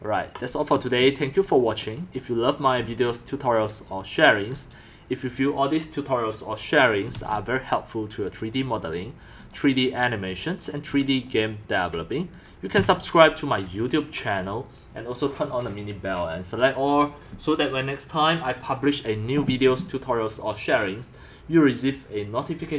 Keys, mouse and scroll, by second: 1.0 c, 1.4-2.4 drag, 2.6-4.3 typing, 3.0 click, 3.8 click, 5.9-7.4 drag, 7.2 ctrl+shift+s, 9.0 click, 9.5 click, 11.2 click, 12.0 click, 12.8 2, 14.1 click, 16.4-21.7 drag.